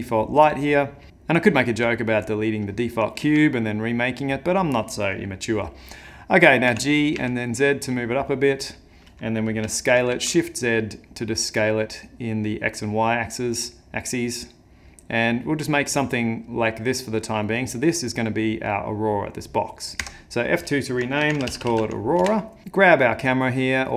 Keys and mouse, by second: 1.7 x, 3.2 shift+a, 6.7 g, 9.2 middle click, 9.6 s, 15.9 middle click, 20.0 F2, 22.6 click, 23.0 middle click.